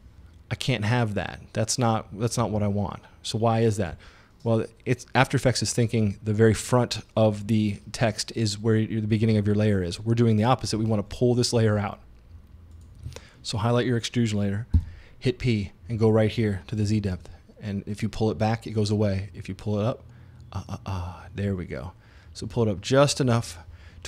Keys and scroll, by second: 14.8 p.